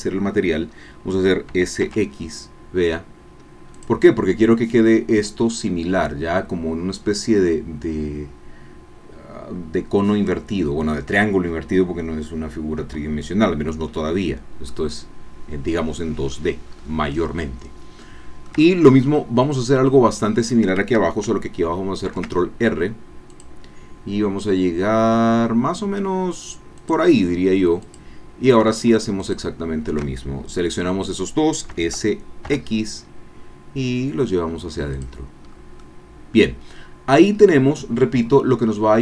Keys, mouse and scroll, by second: 1.5 s, 2.3 x, 3.7 click, 14.2-14.6 scroll down 2, 14.7-16.6 drag, 16.6-17.2 scroll up 1, 18.0-20.4 shift+drag, 22.0 ctrl+r, 23.5 click, 26.8 click, 27.8 click, 31.7 s, 32.4 x, 34.9 click, 35.5 scroll down 1, 35.8-37.3 drag, 37.4 scroll up 1, 37.7-39.0 middle drag.